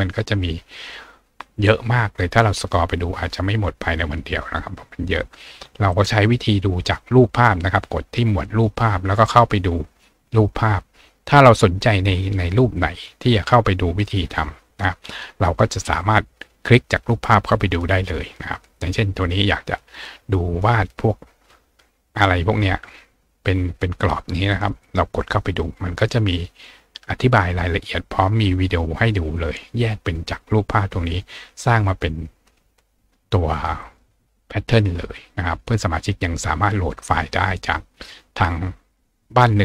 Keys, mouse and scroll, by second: 1.2 scroll down 1, 1.8-2.5 scroll down 1, 2.8 scroll down 1, 3.9 scroll down 1, 4.6 scroll down 1, 5.9 click, 8.8-10.2 scroll down 2, 11.6-12.1 scroll down 2, 12.4-15.4 scroll down 2, 15.7-16.7 scroll down 2, 16.7 scroll down 1, 17.7-19.6 scroll down 2, 21.4-21.9 scroll down 2, 22.3 scroll down 2, 24.5 click, 27.7 scroll down 2, 33.8 click, 37.4 scroll down 2.